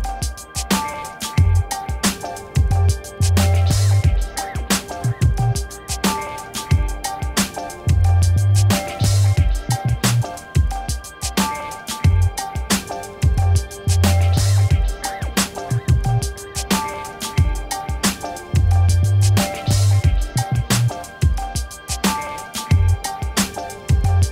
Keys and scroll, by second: 15.9 ctrl+-.